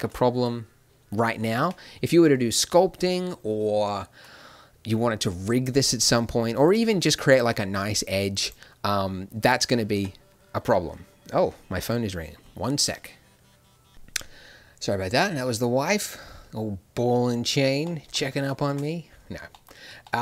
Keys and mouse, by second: 1.1 middle click, 1.6 Tab, 6.6-9.6 drag, 9.6 Tab, 9.9 Tab, 17.8 middle click.